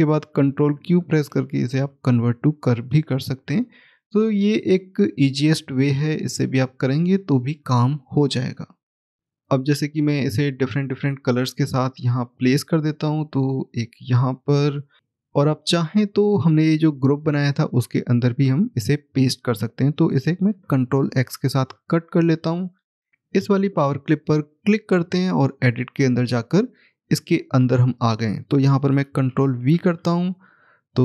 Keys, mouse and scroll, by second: 1.1 ctrl+q, 9.2-9.7 scroll down 1, 10.3 middle click, 12.2 click, 14.0-14.6 scroll up 1, 14.6 middle click, 15.0 ctrl+z, 23.1 click.